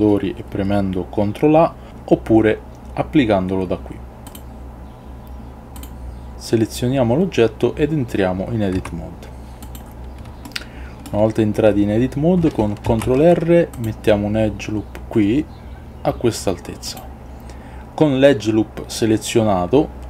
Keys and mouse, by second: 8.9 Tab, 10.7 shift+middle click, 12.9 ctrl+r.